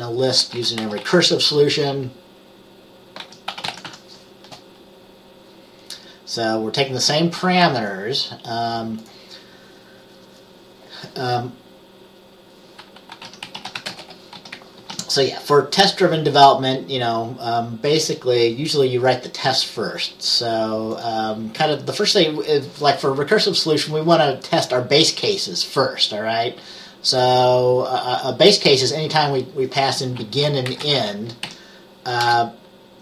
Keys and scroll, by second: 0.4-1.7 typing, 3.1-4.5 typing, 13.2-15.0 typing, 30.7-33.0 typing.